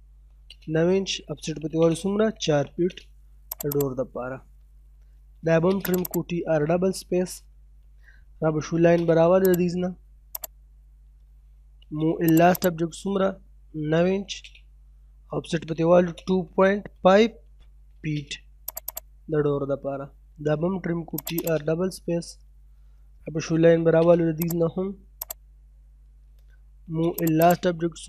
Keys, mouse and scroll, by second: 0.1 space, 1.2 o, 1.4 space, 1.8 4, 2.5 space, 2.8-3.5 scroll up 1, 3.5 click, 4.6-5.6 typing, 5.5-5.9 scroll down 1, 5.9 click, 6.4-6.7 scroll down 1, 6.7 middle click, 7.0-7.6 scroll up 1, 8.3 l, 8.5 space, 8.8 scroll up 1, 9.5 click, 11.4 m, 11.5 space, 11.8 l, 12.0 space, 12.3 right click, 12.6 click, 13.8 9, 14.0 space, 15.5 o, 15.7 space, 16.0 2, 17.7 space, 18.7 click, 19.2 scroll down 1, 19.5 middle click, 20.2-21.1 typing, 21.2 click, 21.7 scroll down 1, 21.9 middle click, 22.3-23.4 scroll up 1, 23.4 l, 23.5 space, 24.4 click, 26.4 m, 26.5 space, 26.8 l, 27.0 space, 27.2 right click, 27.5 click.